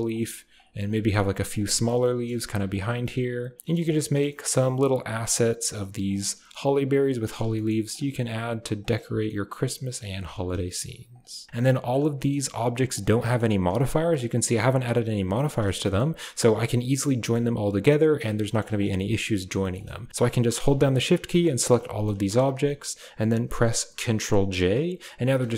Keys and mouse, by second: 0.0-8.9 typing, 2.0 click, 3.6 middle click, 3.9 click, 4.2 middle click, 6.1 drag, 7.5 drag, 7.7 click, 9.1 middle click, 9.7 drag, 10.1-11.5 typing, 11.7 click, 13.2 middle drag, 13.5 drag, 14.0 click, 15.3 shift+drag, 15.5 a, 15.8 shift+click, 17.1 shift+click, 18.0 click, 18.2 g, 18.7 a, 19.5 shift+click, 20.1 a, 20.7 shift+drag, 20.9 shift+click, 21.2 shift+click, 21.6 shift+click, 21.9 shift+click, 22.3 shift+click, 24.3 ctrl+j, 25.0 g.